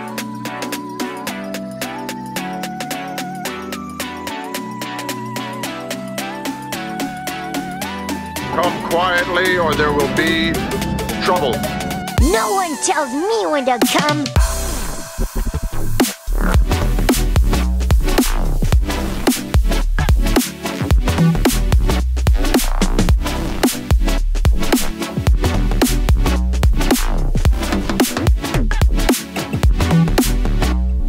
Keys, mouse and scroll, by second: 0.8 click, 0.8-2.8 typing, 4.0 click, 5.0 g, 5.1 g, 5.9 click, 6.3 click, 6.5 g, 6.6 g, 7.1 click, 7.7-9.4 middle drag, 10.5 g, 10.8 x, 14.2 click, 15.2 middle click, 16.1 click, 17.0 click, 17.3 shift+click, 18.4 g, 18.7 z, 21.4 click, 22.3 g, 22.7 z, 24.0 click, 24.9 g, 25.2 z, 27.4 click, 27.4 typing, 29.7 click, 30.2 g, 30.3 g.